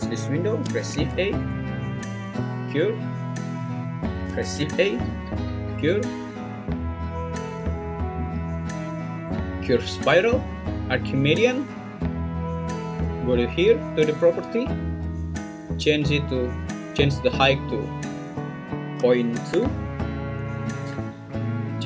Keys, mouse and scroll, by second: 0.8 shift+a, 4.4 shift+a, 13.2 click, 17.7 click.